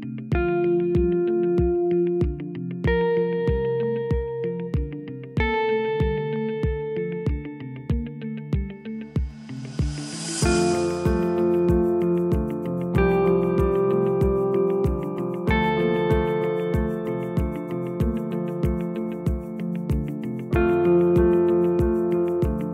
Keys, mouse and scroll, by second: 4.5 click, 7.1 click, 7.7 s, 12.7 click, 13.3 s, 19.4 ctrl+r, 22.5 s.